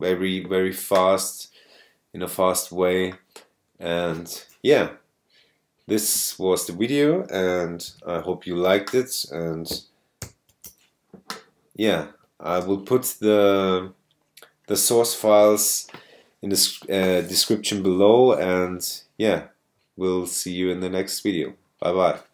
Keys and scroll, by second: 6.3 super+space, 7.1 space, 7.9 alt+super+i, 10.3 ctrl+l.